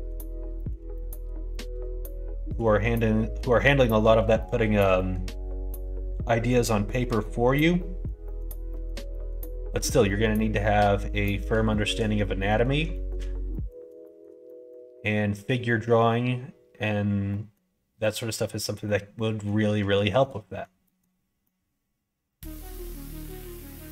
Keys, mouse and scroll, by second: 0.5 middle click, 0.9 shift+middle click, 1.4 middle click, 2.0 shift+middle click, 2.8 scroll up 1, 2.9 middle click, 3.8 scroll up 1, 4.0 scroll down 1, 4.3 scroll up 1, 4.5 middle click, 4.5 scroll down 1, 4.9 shift+middle click, 6.4 scroll up 1, 6.5 middle click, 7.2 scroll down 1, 7.7 scroll up 1, 7.7 middle click, 8.2 middle click, 9.0 shift+middle click, 10.0-11.3 middle drag, 11.6 shift+middle click, 12.4 middle click, 12.9 shift+middle click, 13.4 middle click, 14.0 shift+middle click, 17.2 scroll up 1, 17.3 middle click, 17.5 scroll down 1, 18.8 scroll up 1, 18.8 middle click, 19.4 scroll down 1, 19.9 scroll up 1, 20.0 shift+middle click, 20.1 scroll down 1, 20.4 scroll up 1, 20.4 middle click, 20.6 scroll down 1, 20.8 scroll up 1, 20.8 middle click, 21.4 scroll up 1, 21.4-22.6 middle drag, 23.1 scroll up 1, 23.2-23.9 middle drag.